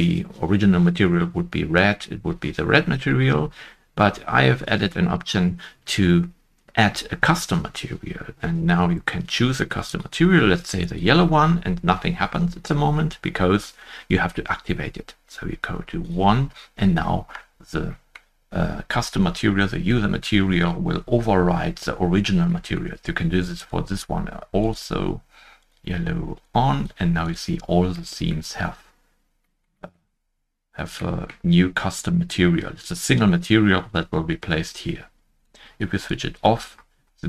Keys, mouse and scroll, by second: 2.9 shift+middle click, 2.9 shift+click, 2.9 scroll up 2, 16.6-16.9 scroll down 1, 17.9 shift+middle click, 17.9-21.0 scroll down 1, 22.2 shift+middle click, 22.5 shift+middle click, 27.9-28.5 scroll down 1, 28.5 shift+middle click, 29.7 middle click, 30.9 shift+middle click, 30.9 middle click, 36.6 shift+middle click, 36.6-37.0 scroll up 1.